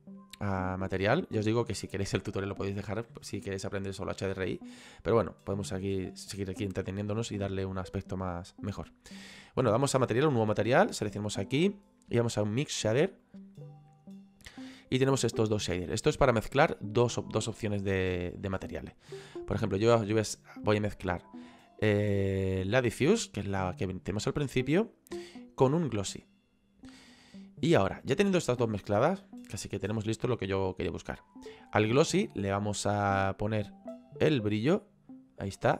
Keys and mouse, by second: 0.8 click, 7.4 click, 11.0 click, 13.3 click, 19.1 click, 23.0 click, 25.0 click, 26.2 click, 33.3 click.